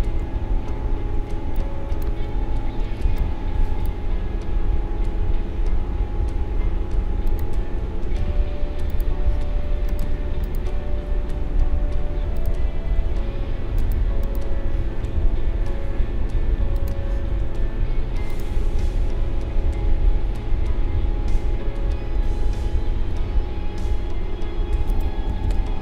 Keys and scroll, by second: 3.0 space.